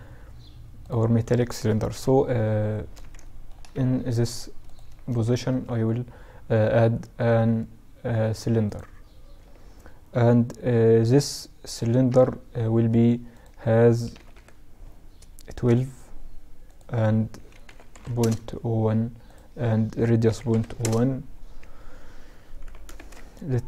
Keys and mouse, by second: 1.1 KP_1, 2.4-3.8 middle drag, 2.9 z, 3.8-5.5 drag, 3.8-5.2 right drag, 4.5 shift+a, 11.2 F6, 21.7 s.